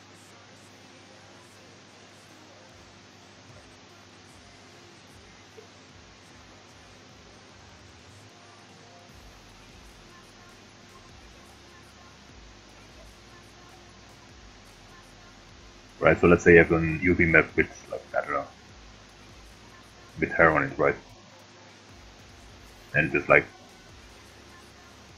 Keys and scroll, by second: 15.5 ctrl+z.